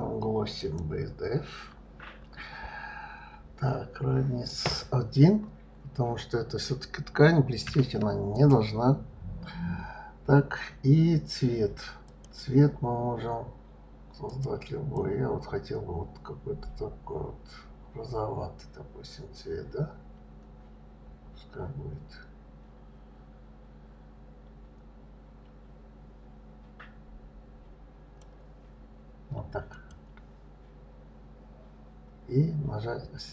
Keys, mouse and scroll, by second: 4.5 click, 12.0 click, 29.7 click.